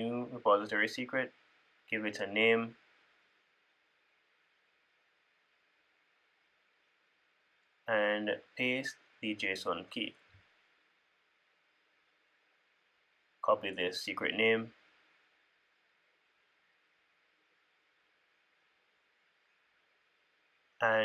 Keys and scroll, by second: 8.5 super+v, 19.4 super+c, 20.5 super+c.